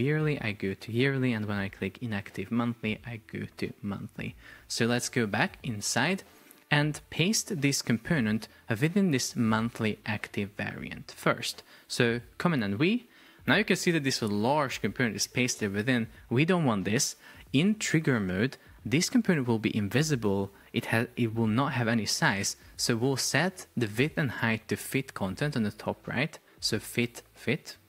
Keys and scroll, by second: 5.1 super+0, 12.5 super+v.